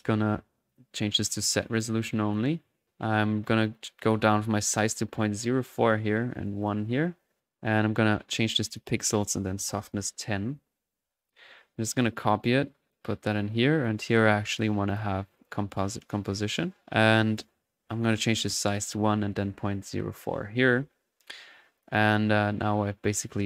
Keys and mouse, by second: 3.7 click, 6.3 click, 8.2 click, 8.6 click, 9.1 drag, 11.2 click, 11.7-12.4 typing, 11.9-14.0 ctrl+drag, 14.5 drag, 14.8 drag, 15.3 click, 16.9-17.6 typing, 17.1 click, 18.4-18.7 drag, 20.9-21.7 typing, 21.7 click.